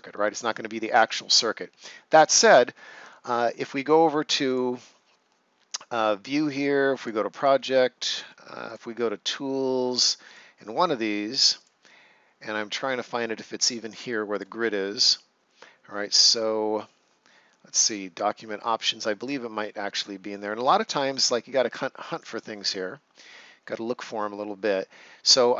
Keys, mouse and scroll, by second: 0.6 scroll down 1, 0.7 ctrl+scroll up 1, 4.4 click, 6.9 click, 14.3 click, 19.2 click, 22.1 click.